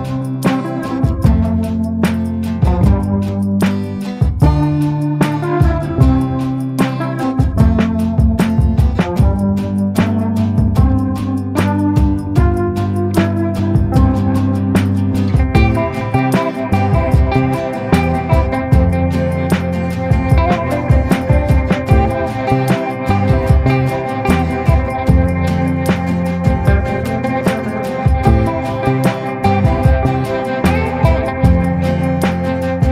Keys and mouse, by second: 0.5 ctrl+z, 0.7-2.5 [, 1.0 click, 2.5 click, 3.5-6.8 typing, 4.0 click, 4.8 click, 5.4 ctrl+z, 5.4 click, 6.3 click, 6.7 ctrl+z, 7.0 click, 7.4 ctrl+z, 7.7 click, 8.7 click, 9.5 ctrl+z, 9.6 [, 9.8 click, 9.8 [, 10.2 ctrl+z, 10.4 click, 11.0 ctrl+z, 11.0 ], 11.2 click, 11.8 [, 12.0 click, 12.9 ], 13.2 click, 13.6 ctrl+z, 13.6 [, 13.8 click, 14.6 ], 15.4 click, 15.4 ], 15.9 click, 16.5 ctrl+z, 17.1 ctrl+z, 17.5 click, 19.2 middle click, 20.0 shift+middle click, 20.3 middle click, 22.7 ], 23.0 ], 23.1-25.1 drag, 25.7 click, 26.4 ctrl+z, 26.7 click, 27.0 click, 27.2 click, 27.5 click, 27.8 click, 28.2 click, 28.4 click, 29.2 click, 29.9 click, 30.5 [, 30.8 [, 30.9 [, 31.0 click, 31.9 ctrl+z, 32.5 ].